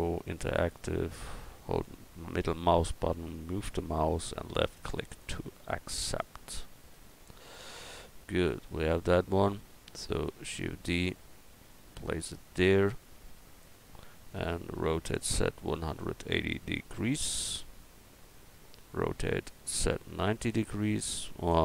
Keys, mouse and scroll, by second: 3.3-8.9 drag, 8.0-10.3 middle drag, 10.3 shift+d, 10.9-12.6 drag, 12.3 middle click, 12.5 right click, 14.8 r, 17.7-21.4 drag, 19.1 r.